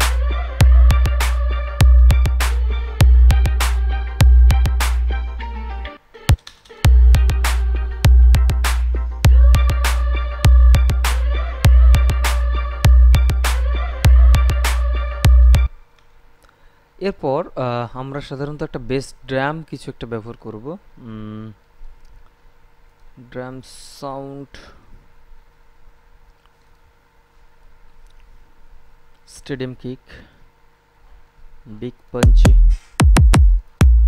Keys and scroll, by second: 6.2 space, 15.8 space.